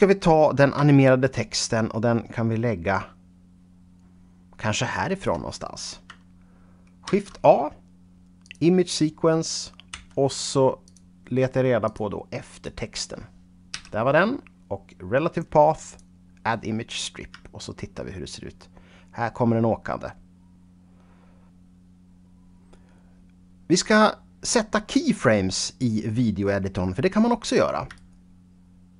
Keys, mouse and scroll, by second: 0.8-5.4 shift+right drag, 6.9 shift+a, 8.3 click, 9.8 p, 10.7 click, 11.7 click, 12.4 click, 13.6 a, 15.7 click, 17.5-20.0 shift+right drag, 27.9 shift+double right click.